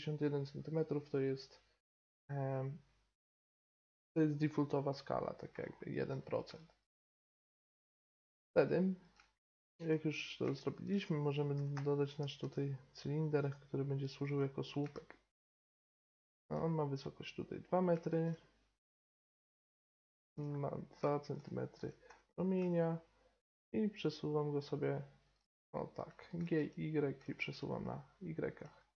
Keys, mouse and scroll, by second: 5.5-7.0 middle drag, 7.0-8.0 right drag, 8.0-8.3 middle drag, 8.3-8.8 right drag, 9.0 middle click, 11.5 g, 14.3-15.9 middle drag, 19.8 middle click, 20.1-21.3 middle drag, 21.7 g, 25.5-28.9 middle drag.